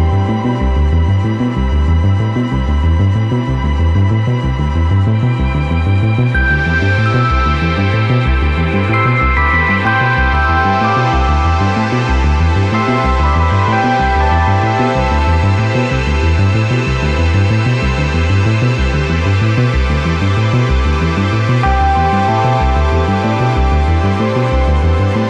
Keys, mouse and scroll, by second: 0.0-1.1 drag, 2.7 click, 4.6 click, 6.7-7.1 middle drag, 7.1 z, 7.5-8.1 middle drag, 8.2 right click, 8.5 scroll down 1, 8.6 scroll up 4, 8.8 KP_7, 9.2 scroll up 1, 9.3 shift+a, 11.7 Tab, 11.8 middle click, 12.1 s, 15.0 g, 16.9 KP_7, 17.1 s, 19.3 s, 20.1 g, 21.2 ctrl+r, 23.0-23.5 middle drag, 23.5 right click, 24.0 KP_7, 24.2 e.